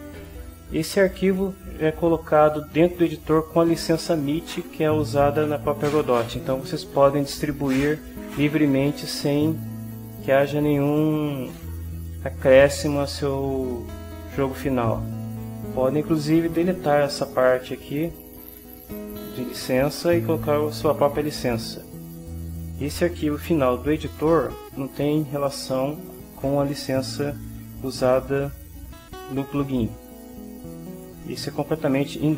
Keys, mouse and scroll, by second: 17.5-19.6 drag, 22.1 click.